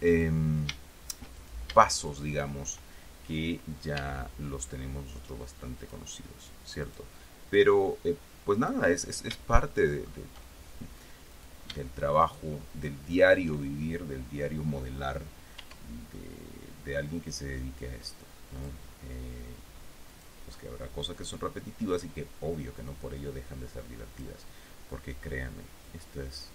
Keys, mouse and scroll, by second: 0.4 click, 1.7 shift+right click, 2.3 shift+right click, 4.3 e, 6.1 click, 7.1 right click, 7.9-9.2 drag, 9.4 scroll down 3, 9.8 shift+middle click, 11.6 right click, 12.5 shift+right click, 12.9 shift+middle click, 15.9 e, 18.9 click, 20.4 right click, 21.5-22.5 drag, 23.2-24.7 drag, 26.2-26.5 drag.